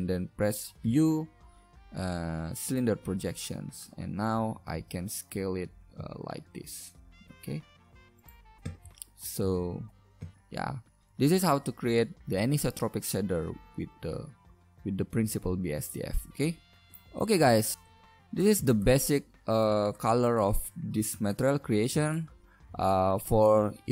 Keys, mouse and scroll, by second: 0.8 u, 9.5 shift+z, 12.4 shift+z, 14.0 Tab, 16.9 KP_Divide, 19.0-20.3 middle drag, 21.3 middle click.